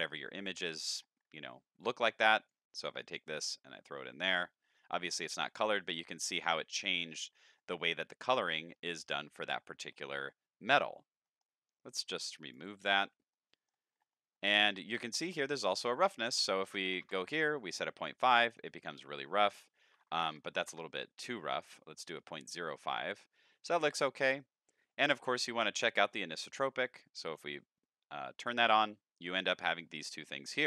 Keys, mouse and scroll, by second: 0.4 middle click, 1.1 middle click, 1.3-2.1 scroll down 3, 2.1 click, 3.0-3.8 drag, 5.6-6.1 middle drag, 7.1-7.6 middle drag, 8.7 middle drag, 9.7 middle drag, 11.3 middle click, 12.0-12.5 drag, 13.3 middle click, 13.9-14.3 scroll up 5, 14.4 middle click, 15.9 click, 16.9 KP_5, 17.0 KP_Enter, 18.2 middle click, 19.5 click, 20.1 KP_Decimal, 20.2 KP_0, 20.4 KP_5, 21.8 middle click, 23.4 middle click, 24.9 middle click, 26.5 click.